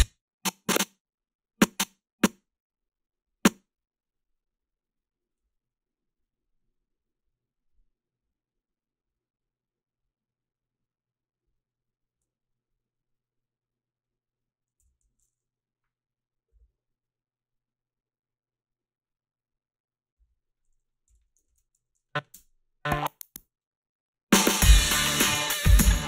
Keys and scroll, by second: 14.8 f, 20.8-22.4 typing, 21.8 ctrl+r.